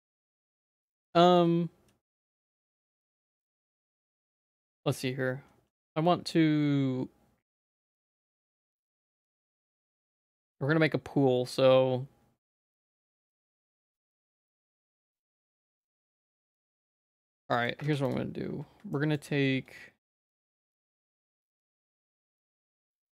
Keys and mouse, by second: 0.4 shift+middle click, 1.2 ctrl+s, 2.2 click, 2.8 shift+click, 3.8 ctrl+s, 9.6 shift+a, 13.4 click, 13.6 middle click, 14.0 shift+middle click, 14.4 middle click, 14.9 shift+middle click, 15.8 Tab, 16.0 2, 17.0 z, 17.5 middle click, 17.8 1, 18.9 shift+middle click, 20.5 z, 20.8 middle click, 21.6 middle click, 22.0 2, 22.9 shift+middle click.